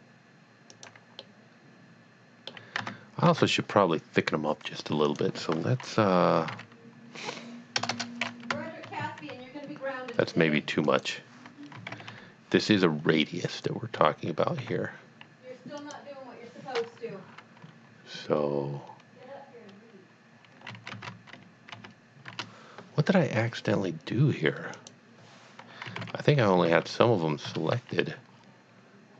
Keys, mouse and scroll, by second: 0.7 click, 1.2 middle click, 1.6 middle click, 2.8 Tab, 3.3 Tab, 5.0 click, 6.4 KP_Decimal, 6.5 KP_1, 7.8 BackSpace, 8.0 BackSpace, 8.5 KP_1, 8.8 Tab, 9.0 KP_1, 9.3 Tab, 11.0 click, 11.8 KP_Decimal, 11.9 KP_5, 12.2 Tab, 14.0 Tab, 14.6 a, 15.8 click, 20.7 KP_1, 20.9 Tab, 21.1 KP_1, 21.7 Tab, 22.3 KP_Enter, 23.5 scroll down 1, 24.7 click, 25.9 KP_Decimal, 26.0 KP_5, 26.3 Tab, 26.6 KP_Decimal, 26.7 KP_5, 27.5 KP_Enter, 28.4 scroll down 1.